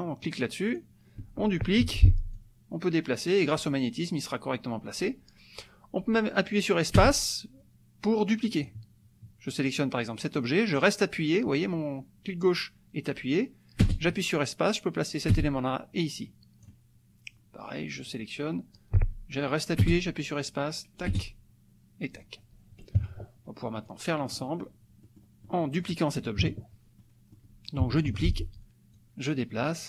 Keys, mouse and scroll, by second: 0.7 click, 1.8 ctrl+d, 2.3-8.8 ctrl+drag, 7.0 space, 10.3-16.8 drag, 13.8 space, 15.3 space, 18.0 click, 19.8-22.3 drag, 19.8 space, 21.1 space, 23.0 KP_Subtract, 23.9 click, 25.0 middle click, 25.4 middle click, 25.5 click, 26.4 KP_Subtract, 27.0 click, 28.0 ctrl+d, 28.9-29.8 drag.